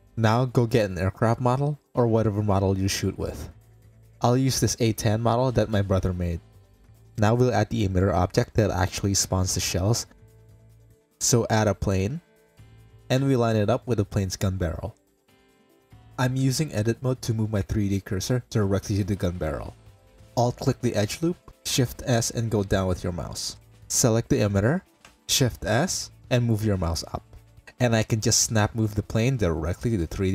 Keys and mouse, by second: 2.2 middle click, 2.4 click, 4.6-5.9 drag, 6.7 click, 7.0 shift+middle drag, 8.0 click, 9.1 h, 9.4 click, 9.9 click, 10.4 shift+a, 13.2 click, 14.4 click, 16.1 shift+middle drag, 16.5 Tab, 18.0 KP_Decimal, 18.1 middle click, 19.0 click, 19.6 3, 21.4 shift+s, 22.5 click, 23.0 click, 23.9 click, 24.4 Tab, 25.1 click, 25.8 shift+s, 26.4 click, 26.7 r.